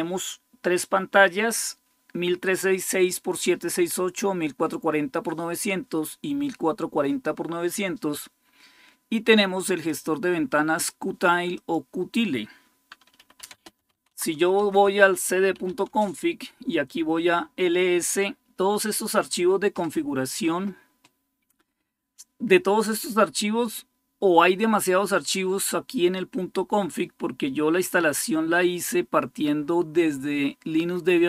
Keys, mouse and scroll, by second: 9.7-11.3 drag, 11.4 click, 12.9-15.8 typing, 14.3 Return.